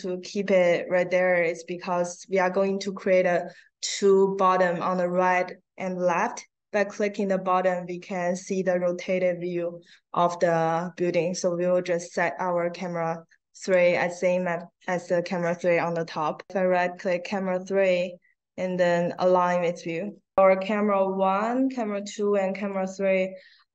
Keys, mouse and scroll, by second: 13.5 right click, 20.0 click, 21.2 click, 21.8 click, 22.5 click.